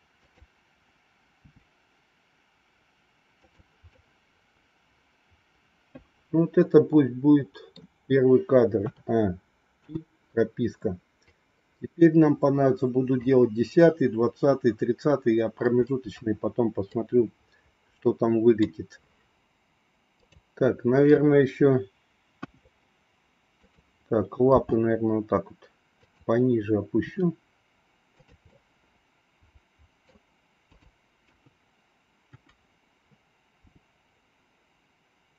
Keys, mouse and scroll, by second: 0.3 click, 1.4 g, 3.9 scroll up 1, 4.2-7.9 middle drag, 8.8 a, 9.8 i, 11.3-13.3 drag, 16.9-18.5 middle drag, 20.0 click, 22.3 KP_1, 24.4 g, 26.9 r, 28.4-30.0 middle drag, 31.4 KP_3, 32.3 KP_1, 33.6 g.